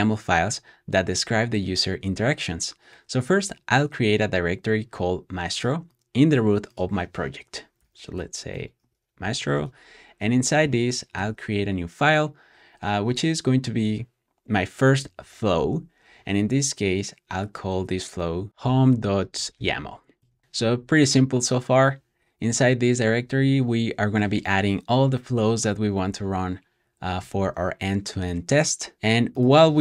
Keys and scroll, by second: 8.6-11.1 typing, 10.2 shift+super+p, 20.0-20.7 typing.